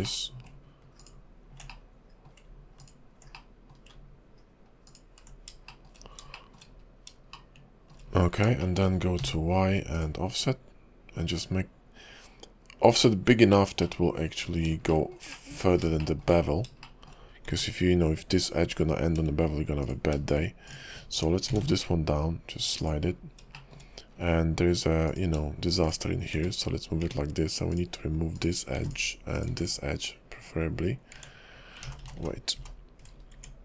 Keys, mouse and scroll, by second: 0.0 middle click, 1.0 ctrl+click, 1.7 middle click, 2.8 ctrl+click, 3.3 middle click, 4.9 ctrl+click, 5.7 shift+middle click, 6.0 scroll up 3, 6.3 shift+middle click, 6.7 scroll up 2, 7.3 shift+middle click, 8.0-8.5 scroll down 6, 8.6 shift+middle click, 8.9 scroll down 2, 9.2 y, 13.8 middle click, 14.9 shift+middle click, 15.3 middle click, 16.0 shift+middle click, 16.3-16.7 scroll up 6, 16.8 shift+middle click, 17.2 scroll up 3, 17.5 Tab, 19.8 click, 20.7 shift+click, 21.5 g, 23.1 scroll down 3, 23.5 shift+middle click, 24.1 scroll up 3, 25.1 click, 25.8 shift+click, 26.7 1, 27.0 Tab, 27.7 click, 28.3 click, 28.8 x, 29.3 click, 29.5 x, 31.2 Tab, 32.0 ctrl+z, 32.2 ctrl+z, 32.4 ctrl+z, 32.7 ctrl+z, 33.1 scroll up 3, 33.3 Tab.